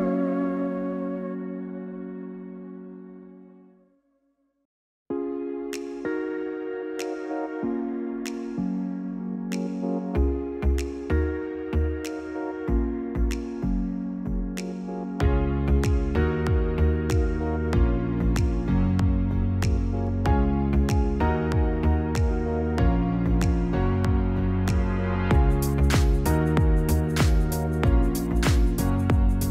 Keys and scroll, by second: 9.8 ctrl+c, 10.0 ctrl+v, 24.3 ctrl+c, 27.0 ctrl+v, 27.8 0.